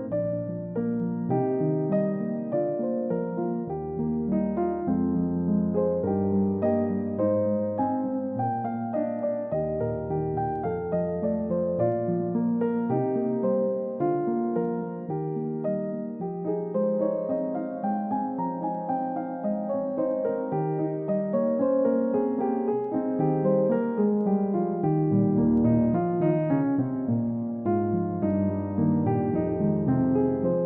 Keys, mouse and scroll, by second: 0.3 middle click, 3.7-4.2 scroll down 1, 4.6 scroll up 1, 6.8-8.1 scroll down 1, 10.2 scroll down 1, 12.0 middle click, 12.5 scroll up 1, 18.8 scroll down 1, 20.2-20.6 scroll up 1, 27.0-27.5 scroll down 1, 27.5 middle click, 28.3 scroll down 1, 28.6-29.0 scroll up 1, 30.4 middle click.